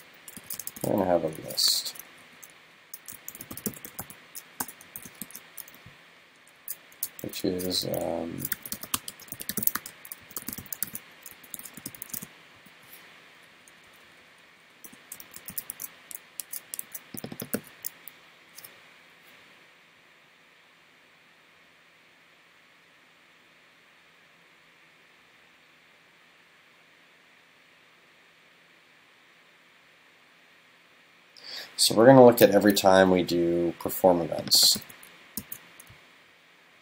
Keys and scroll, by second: 1.8 shift+super+Left, 10.9 super+s, 15.8 super+s, 16.9 super+s, 17.6 super+c, 34.8 super+c, 35.4 super+f.